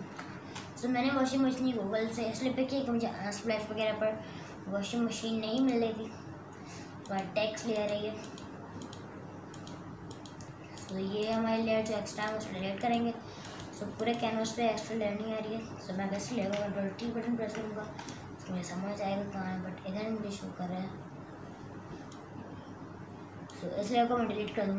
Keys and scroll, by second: 0.0 Return, 17.0 ctrl+t.